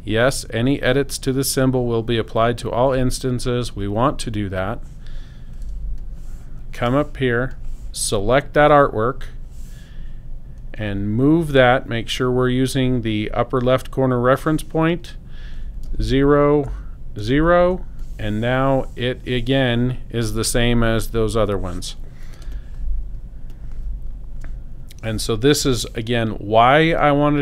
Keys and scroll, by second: 5.7 space, 15.8 0, 16.5 Tab, 17.2 0, 17.7 Return, 22.4 space.